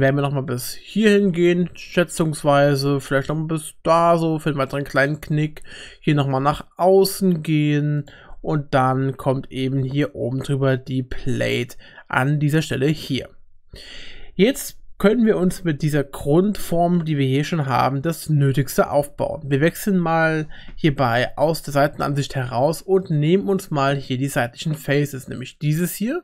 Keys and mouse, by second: 1.9 shift+middle click, 3.2 e, 5.9 e, 9.2 e, 21.4-23.0 middle drag, 23.5 3, 25.8 middle click.